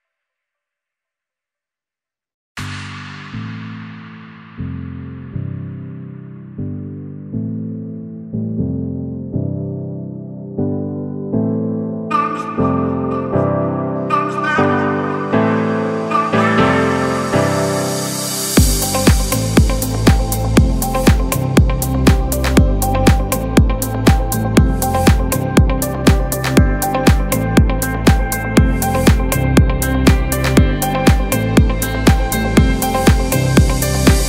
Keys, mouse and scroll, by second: 1.1 alt+scroll down 1, 1.7 space, 1.9 click, 2.2 space, 2.7 click, 3.1 space, 3.3 click, 3.6 space, 4.0 click, 6.6 click, 6.6 typing, 6.7 alt+scroll up 1, 7.5 click, 7.9 space, 8.1 click, 8.4 space, 9.5 click, 11.8 b, 13.8 click, 16.2-18.3 alt+right drag, 18.3 alt+scroll up 1, 18.3 typing, 19.0-20.5 alt+scroll up 1, 20.9 click, 28.4-33.7 shift+drag, 34.1 alt+scroll up 1.